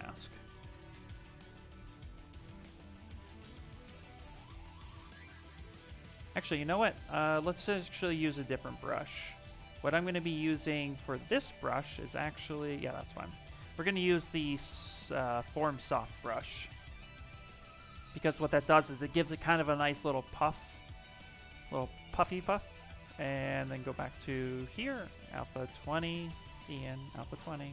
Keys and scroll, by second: 0.3 s, 3.8 s, 6.2 ctrl+z, 13.7 b, 15.1 f, 18.0 s.